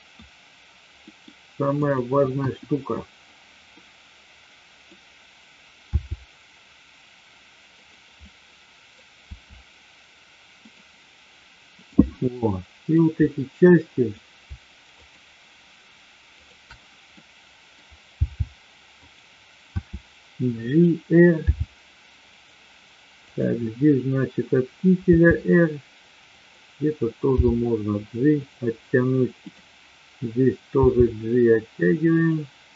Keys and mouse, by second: 1.0 middle click, 1.7-2.7 drag, 2.9 KP_1, 3.7-4.9 middle drag, 6.0 r, 7.7 click, 8.2 middle click, 9.2 r, 11.7-12.7 drag, 12.7 middle click, 13.1-14.1 middle drag, 15.0-16.0 shift+drag, 16.3-17.2 shift+drag, 17.3-17.7 middle drag, 18.0 g, 19.0 click, 19.7 r, 21.5 g, 23.1-24.1 drag, 25.1 r, 26.3 click, 27.3 g, 29.3-30.2 drag, 30.7 g.